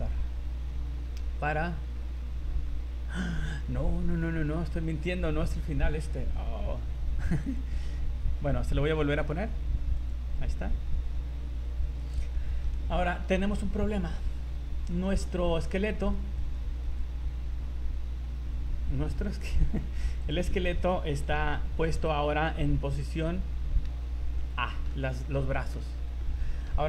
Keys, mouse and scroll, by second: 7.4 click, 8.3 scroll down 3, 9.9 click, 12.1 right click, 12.3 middle click, 12.8 middle click, 14.0 right click, 14.2 scroll down 3, 15.1 right click, 16.1 right click, 16.4 right click, 16.9 right click, 19.4 click, 21.2 a, 21.5 a, 23.9 alt+r, 24.4 middle click, 25.2 scroll up 2, 25.7 middle click, 26.2 middle click.